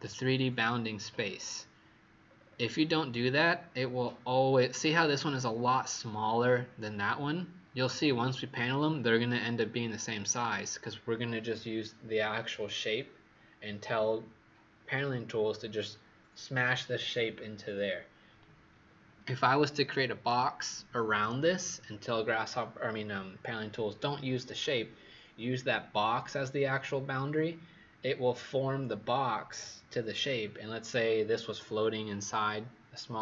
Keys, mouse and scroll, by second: 1.0-2.2 scroll down 6, 2.2-2.8 scroll up 6, 3.4-8.1 scroll up 2.